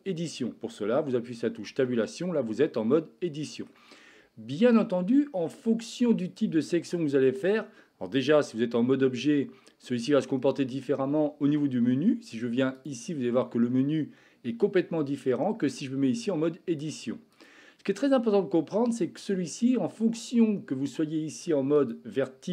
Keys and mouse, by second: 1.7 Tab, 2.3-3.7 middle drag, 11.3 Tab, 12.8-15.5 drag, 15.6 Tab, 17.3-19.2 drag, 21.9-22.5 drag.